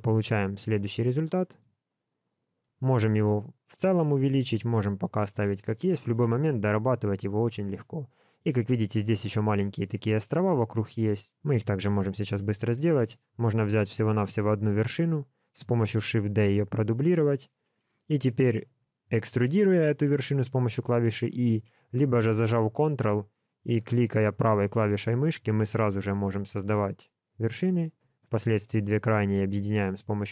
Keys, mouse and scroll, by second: 0.3 alt+a, 0.9 middle click, 1.8-2.6 scroll down 1, 2.6 click, 4.7 middle click, 11.8 KP_7, 12.2 Tab, 13.0 shift+middle click, 13.6 click, 14.7 shift+middle click, 15.4 scroll up 2, 16.1 shift+d, 19.1 e, 23.6 ctrl+click, 24.2 ctrl+right click, 25.4 ctrl+right click, 26.6 ctrl+right click, 28.1 shift+click, 29.5 f.